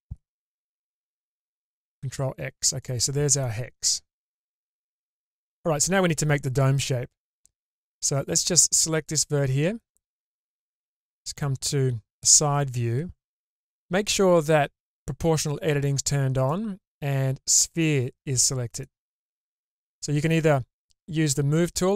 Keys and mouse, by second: 1.7 ctrl+x, 8.0 1, 9.0 click, 9.9-11.4 middle drag.